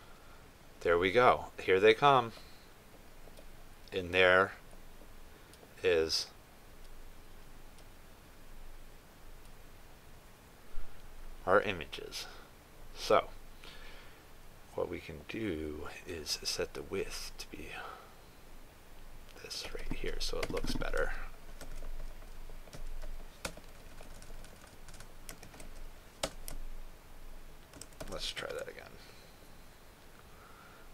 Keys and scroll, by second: 22.6 ctrl+c, 26.5 ctrl+v, 28.8 ctrl+s, 29.4 ctrl+r.